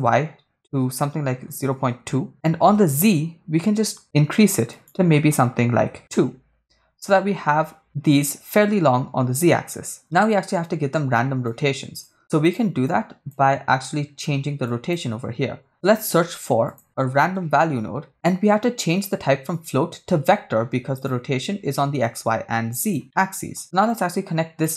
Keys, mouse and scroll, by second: 2.9-4.7 shift+drag, 5.0-6.1 shift+drag, 11.5 click, 12.5 click, 12.9 click, 14.7 click, 15.7 shift+middle click, 16.0 shift+a, 19.5-21.1 drag, 22.0 click, 23.2 middle click, 23.9 click, 24.4-24.7 drag.